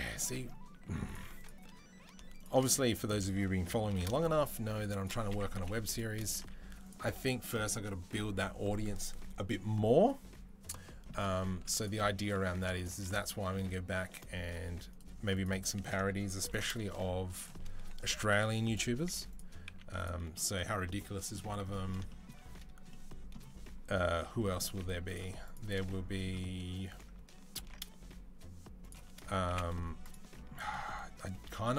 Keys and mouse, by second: 1.1 alt+z, 1.1 alt+middle click, 1.2 alt+click, 1.3-4.9 alt+middle drag, 3.8 ctrl+b, 5.7 Delete, 6.2 z, 11.3 z, 12.6 alt+click, 13.3 z, 15.2 alt+click, 16.3 ctrl+b, 17.9 Delete, 18.9 middle click, 18.9 z, 19.1 click, 19.2-31.7 middle drag, 19.5 z, 24.6 z, 25.2 click, 27.4 ctrl+b, 29.3 Delete.